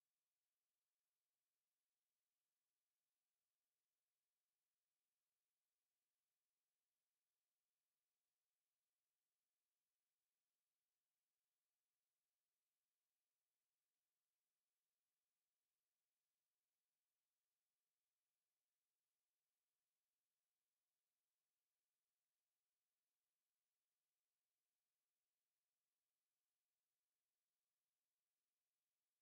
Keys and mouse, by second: 3.5 alt+click.